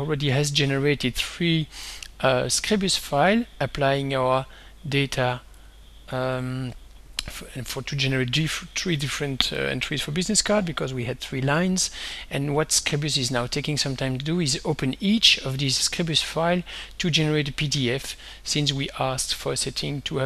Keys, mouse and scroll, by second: 5.7 right click, 6.4 click, 15.7 click, 18.2 click.